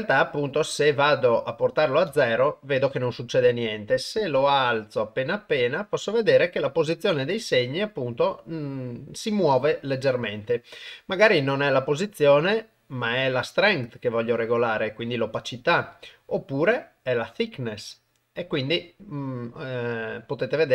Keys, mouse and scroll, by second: 0.0-1.9 drag, 2.1 shift+space, 3.3-5.8 drag, 11.4-11.9 drag, 12.4-13.4 drag, 15.4-15.8 drag, 16.3-17.4 drag.